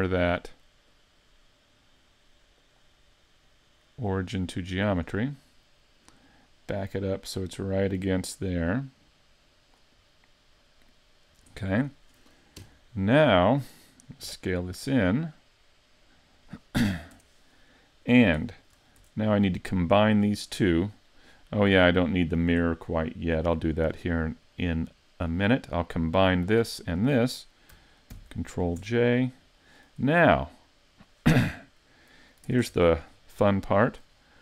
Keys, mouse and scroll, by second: 0.9 click, 2.6 click, 6.2 click, 10.1 middle click, 11.6 shift+middle click, 12.6 KP_5, 13.3 scroll down 1, 14.2 s, 16.4 click, 17.1 Tab, 17.6 middle click, 18.4 shift+middle click, 19.0 Tab, 21.8 right click, 22.4 right click, 23.3 click, 24.6 middle click, 25.6 shift+middle click, 26.1 right click, 26.8 shift+right click, 28.1 ctrl+j, 28.8 Tab, 29.1 scroll up 1, 29.6 shift+middle click, 30.4 middle click, 32.5 ctrl+Tab, 33.3 scroll up 1, 33.7 shift+middle click.